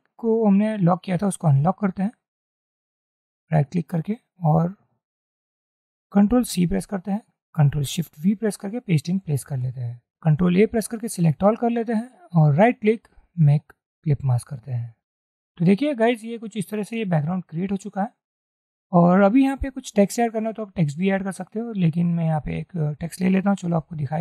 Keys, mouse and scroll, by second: 1.2 right click, 6.5 ctrl+c, 8.2 ctrl+shift+v, 10.7 ctrl+a, 12.7 right click, 16.0-16.4 alt+scroll up 1, 16.8 middle click, 18.0-18.8 alt+scroll down 1.